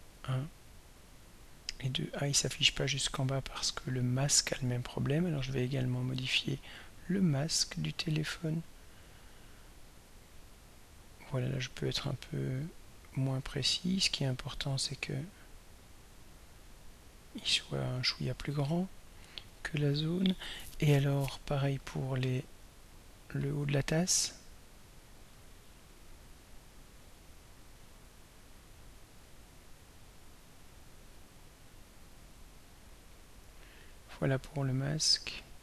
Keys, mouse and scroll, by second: 1.6-4.1 drag, 7.4 click, 10.1-14.7 drag, 16.1-18.3 drag, 22.4-23.1 scroll up 1, 23.9-24.4 scroll up 1, 24.4-24.8 scroll down 1, 27.0 click, 27.9-31.3 drag, 32.8-35.6 drag.